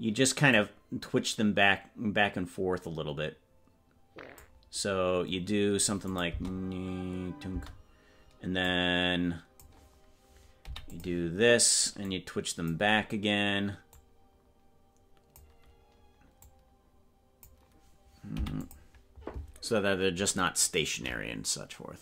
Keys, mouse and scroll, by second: 0.5-4.5 drag, 5.2 scroll up 1, 6.2 click, 6.2 scroll up 3, 6.5 space, 8.7 click, 10.6 i, 12.1 click, 13.9-15.5 drag, 16.5-17.6 drag, 18.3 i.